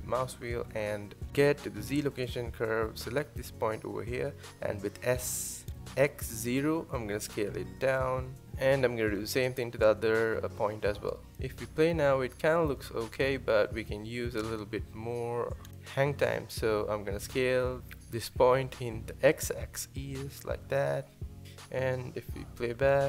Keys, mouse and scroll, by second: 2.3 click, 3.5 s, 6.4 click, 7.3 s, 11.1-11.5 scroll down 1, 11.5 space, 12.8 space, 13.4 click, 13.8 space, 15.1 space, 16.0 click, 16.3 click, 17.3 s.